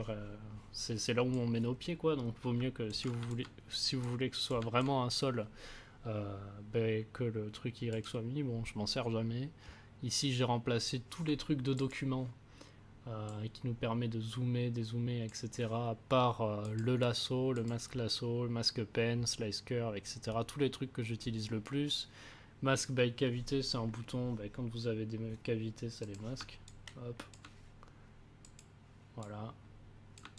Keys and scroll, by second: 3.2 a.